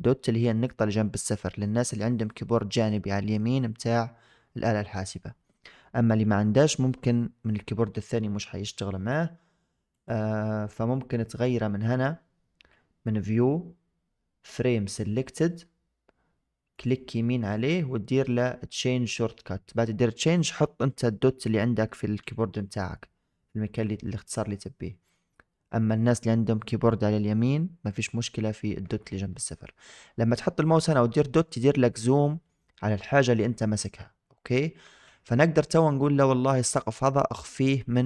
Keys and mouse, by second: 4.8 KP_Decimal, 9.8-25.5 drag.